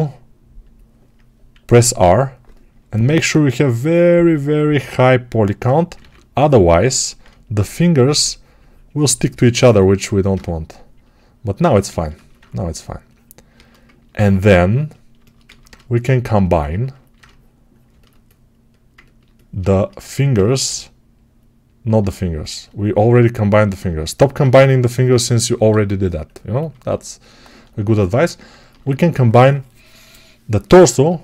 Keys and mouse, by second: 1.6 r, 6.0 ctrl+r, 8.8-10.2 shift+drag, 10.2-14.8 shift+right drag, 14.8-18.6 alt+shift+drag, 18.6-21.8 ctrl+alt+right drag, 20.5 g, 21.8-24.5 alt+drag, 24.5-31.2 alt+right drag.